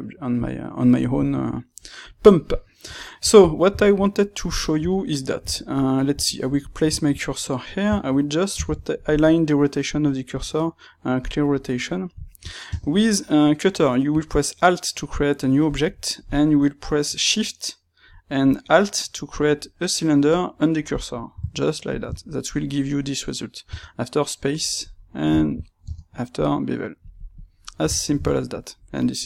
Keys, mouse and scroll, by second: 6.2-11.2 shift+right drag, 11.2 alt+x, 11.7-27.3 middle drag, 15.6 space, 27.3 click, 27.9-29.2 ctrl+middle drag.